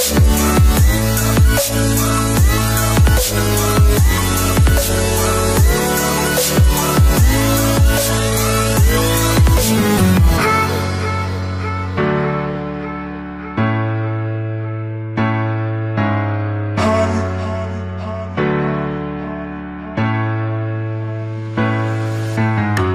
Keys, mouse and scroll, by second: 1.3-2.2 alt+scroll down 2, 2.9-3.2 alt+scroll down 1, 5.1 click, 8.7 click, 9.3-9.7 alt+scroll up 1, 11.7-19.7 shift+drag, 19.7 Return.